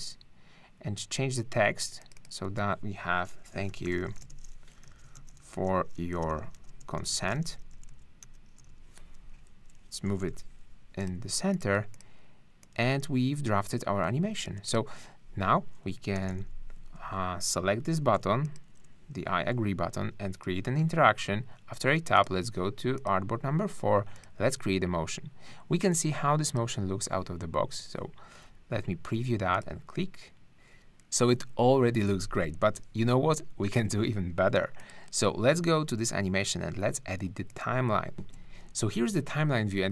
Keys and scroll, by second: 3.7 shift+super+t, 3.8-10.2 typing, 16.1 super+-, 38.2 shift+`.